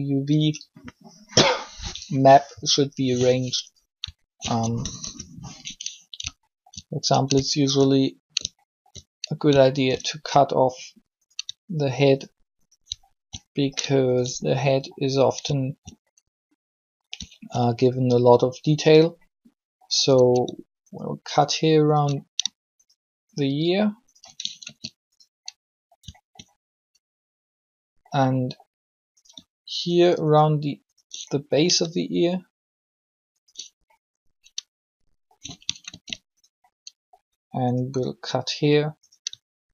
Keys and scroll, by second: 4.8 alt+shift+3, 24.4 ctrl+shift+e, 35.9 ctrl+e.